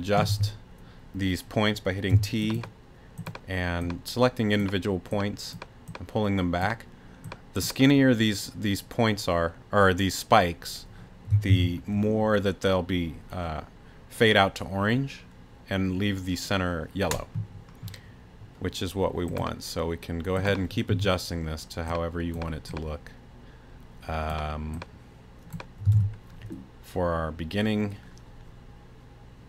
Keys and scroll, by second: 0.3 t, 2.1 t, 11.5 super+r, 20.9 t, 25.9 super+r.